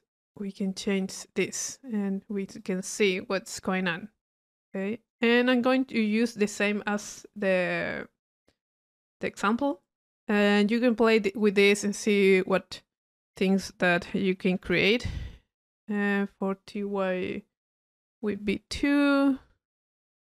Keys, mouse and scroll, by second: 0.3-1.7 drag, 2.6 click, 3.0 middle click, 4.9 click, 5.7 click, 6.3-7.8 middle drag, 11.4 click, 12.2-12.5 drag, 16.2 click, 19.4 click.